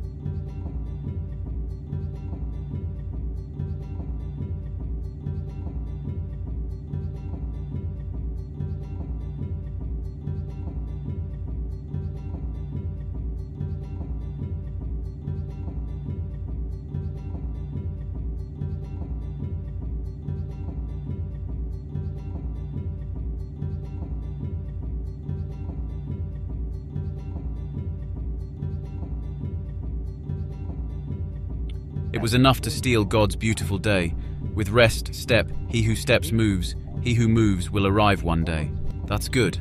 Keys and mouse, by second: 0.5 click, 3.5 typing, 11.4 click, 13.3 click, 14.4-15.4 drag, 15.9-16.4 drag, 16.9 click, 37.7 click.